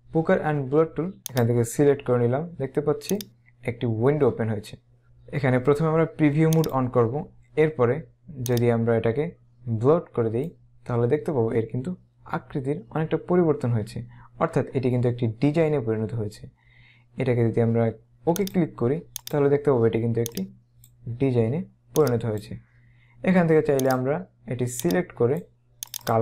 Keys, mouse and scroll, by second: 1.5 click, 3.2 click, 6.7 click, 8.6 click, 18.5 click, 20.4 click, 22.1 click, 24.0 click, 26.0 click.